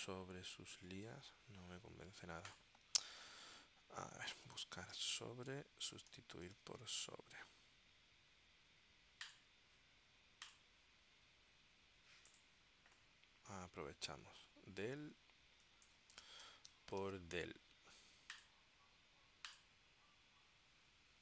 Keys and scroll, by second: 1.1 super+Tab, 3.5 super+f, 4.3-7.2 typing, 5.6 Tab, 16.0-17.8 typing.